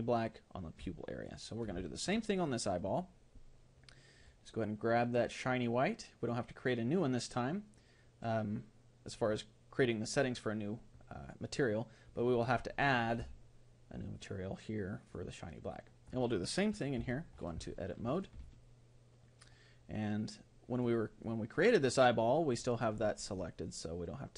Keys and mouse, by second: 0.9-5.5 middle drag, 5.5-9.0 drag, 13.2-16.1 drag, 17.0 Tab, 17.7-23.3 middle drag.